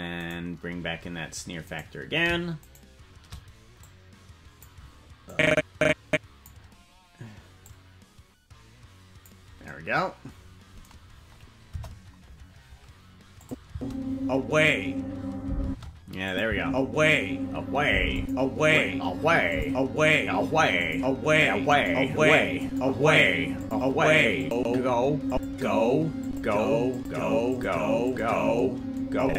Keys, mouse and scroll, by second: 0.4 right click, 1.8 right click, 2.8 shift+right click, 3.8 click, 5.2-6.5 drag, 7.6-9.3 drag, 11.6 KP_0, 13.4 click, 13.6 space, 15.6 space, 16.2 click, 16.4 space, 18.1 click, 19.5 click, 20.8 click, 21.7 click, 22.6 click, 23.6 click, 24.4 click, 25.2 click, 26.2 click, 26.9 click, 27.5 click, 28.0 click, 29.2 click.